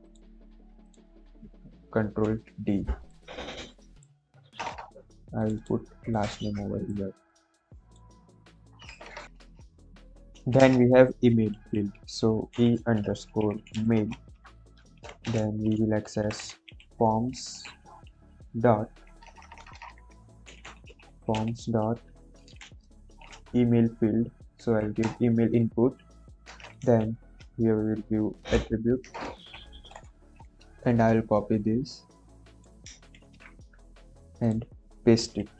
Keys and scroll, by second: 1.9 ctrl+d, 4.4 BackSpace, 8.9 BackSpace, 10.5 Return, 11.5-18.0 typing, 14.2 Right, 19.2-22.6 typing, 24.5 Down, 24.9 Return, 25.8-26.6 typing, 26.7 Left, 28.5-30.4 typing, 33.1 ctrl+c, 35.5 Left.